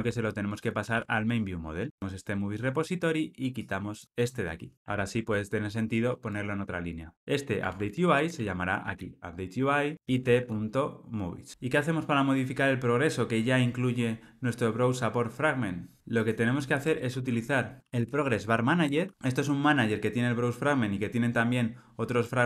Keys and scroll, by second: 0.0 super+c, 0.9 super+v, 4.7 alt+super+l, 7.6 Tab, 9.5 Tab, 18.9 Return.